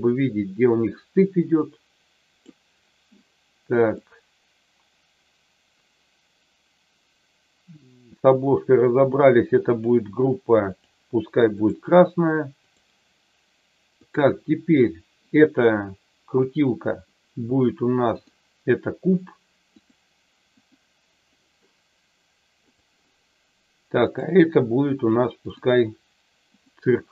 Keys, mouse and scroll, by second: 4.0-8.3 middle drag, 9.8 click, 10.9 click, 13.9 click, 18.3-19.9 drag, 20.5 click, 24.0 click, 25.5-26.7 drag.